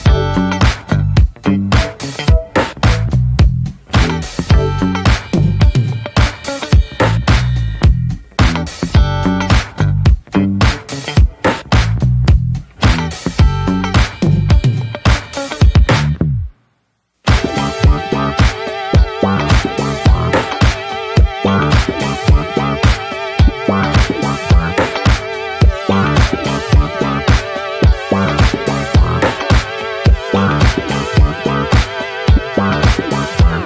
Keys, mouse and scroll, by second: 3.4 click, 4.0 middle click, 4.3 click, 4.6 Tab, 5.2 click, 5.3 Tab, 5.8 click, 6.2-6.7 scroll up 1, 6.7 a, 7.5 middle drag, 7.8 click, 8.0 click, 9.7 alt+middle click, 10.0 scroll up 2, 10.2-10.8 shift+middle drag, 10.8 click, 12.1 ctrl+a, 12.7 middle drag, 12.9 Tab, 13.5 3, 13.8 drag, 14.1-15.0 alt+middle drag, 15.0 s, 23.1 click, 25.0-26.8 drag, 27.0-28.9 drag, 29.4-31.7 drag, 33.0-33.6 drag.